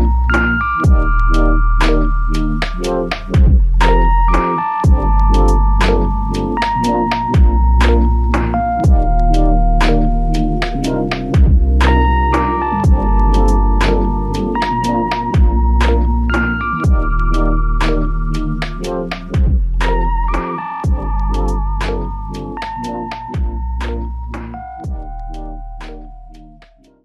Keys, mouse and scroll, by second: 4.7 alt+click.